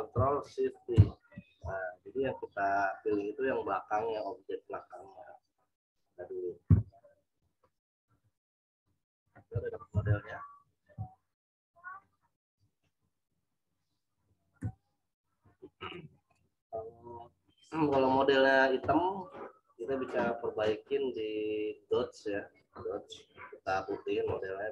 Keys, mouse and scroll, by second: 0.4 ctrl+shift+z, 8.1 m, 8.7 click, 9.8 ctrl+t, 11.5 alt+shift+click, 14.6 Return, 15.2 z, 15.8 click, 20.0 right click, 21.9 click, 24.0 click.